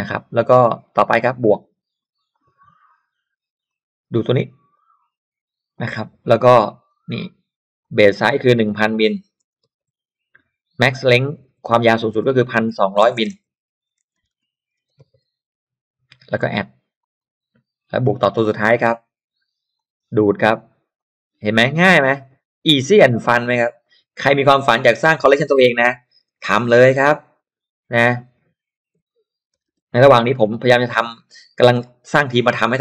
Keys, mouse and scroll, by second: 2.3 click, 3.6 click, 4.7 click, 5.7 click, 6.8 click, 7.8 click, 8.4-9.8 typing, 11.2 click, 11.3-15.8 typing, 17.0 click, 18.4 click, 19.8 click, 21.0 click, 23.0 click, 23.8 click, 24.2 click, 25.0-27.2 typing, 28.0 click, 28.7-30.9 typing, 31.8-32.8 drag.